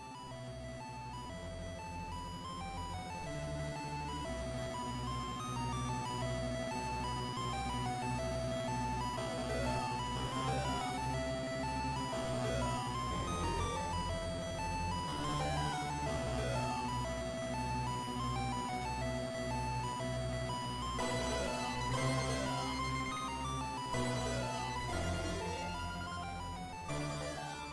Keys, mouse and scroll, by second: 0.7 middle click, 1.8 Tab, 3.3 KP_0, 13.3 middle click, 16.3-17.9 scroll up 3, 17.9 click, 19.8 click, 22.7 click, 24.2 click.